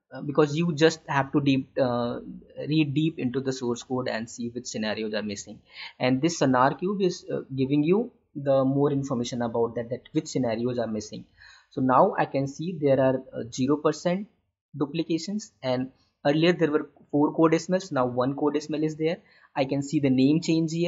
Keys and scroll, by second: 5.5 alt+Tab.